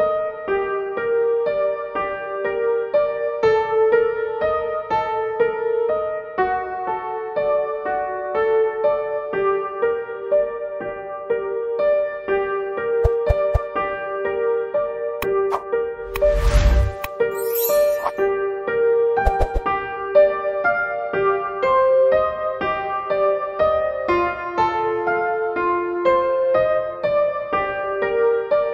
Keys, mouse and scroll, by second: 15.5-22.7 drag, 26.0 click.